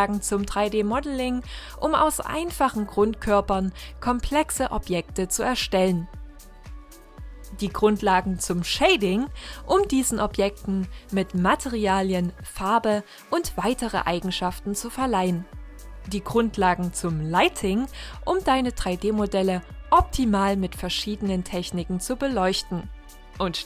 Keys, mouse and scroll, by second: 0.0 Tab, 0.3 f, 0.4 scroll down 1, 0.5-0.9 scroll up 2, 1.2 e, 1.8 Tab, 2.0 g, 2.4 middle drag, 2.6 scroll down 1, 2.7 middle click, 2.9 scroll up 3, 3.0 shift+middle click, 3.4 g, 3.9 middle click, 4.4-5.0 scroll down 1, 5.0 click, 5.2 scroll down 4, 5.4-6.3 shift+middle drag, 6.3-6.9 drag, 6.9-8.5 middle drag, 8.9-10.1 drag, 10.5-16.1 middle drag, 16.1 scroll down 2, 16.3 shift+Right, 17.1 shift+a, 17.7 middle click, 18.0 g, 18.7 middle click, 19.0 r, 19.5 middle click, 19.7 scroll up 4, 20.0 click, 20.5 middle drag, 20.6 scroll down 4, 20.7 middle click, 20.8 KP_0, 21.0 scroll up 2, 21.1 scroll down 3, 21.3-21.9 scroll up 1, 22.0 scroll down 1, 22.1 click, 22.7 scroll up 1.